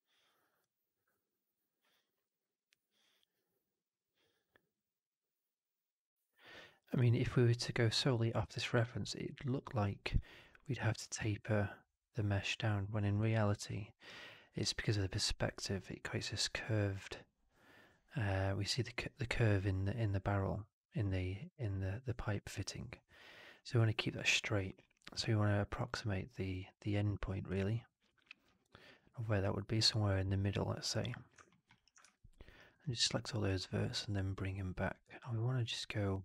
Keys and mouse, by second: 0.5-7.1 drag, 9.3 click, 25.8-27.4 drag, 29.3-31.0 drag, 31.4 alt+middle click, 31.6 alt+right click, 31.9 1, 32.5 click, 33.4-36.2 drag.